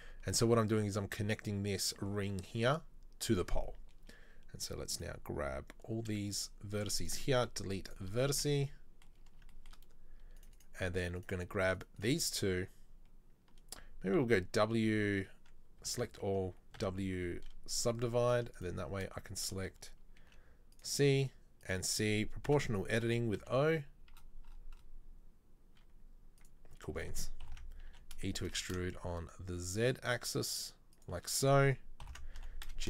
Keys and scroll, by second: 6.0 b, 7.4 Delete, 8.5 a, 14.2 w, 15.9 a, 16.9 w, 20.3 c, 22.5 o, 23.2 g, 27.6 ctrl+l, 27.9 e, 32.1 ctrl+l, 32.5 g.